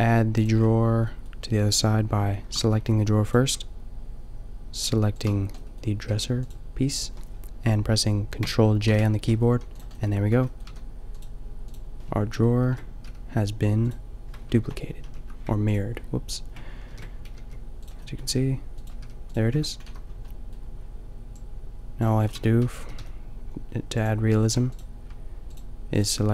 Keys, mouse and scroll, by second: 0.0 g, 0.5-2.2 drag, 2.8 g, 6.0 g, 6.3-8.4 drag, 8.9 ctrl+j, 9.5 a, 10.2 Tab, 10.7 a, 12.6 ctrl+l, 16.9 ctrl+super+l, 17.3 g, 18.2 g, 18.9 g, 19.3-21.3 drag, 19.5 Tab, 19.8 a, 22.3 Tab, 22.7 g, 24.4 a.